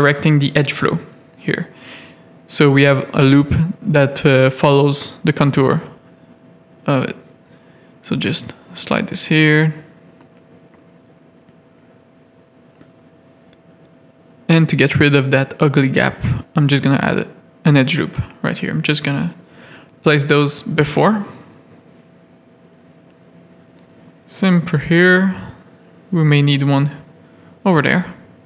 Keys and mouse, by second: 1.9 ctrl+r, 5.4 click, 6.8 click, 7.5 g, 8.8-9.9 drag, 10.5-11.9 drag, 13.8 ctrl+r, 15.4 ctrl+z, 16.8 ctrl+r, 17.8 g, 19.2 click, 21.9 click, 23.1 shift+middle click, 23.7 ctrl+r, 27.6 click, 27.9 g.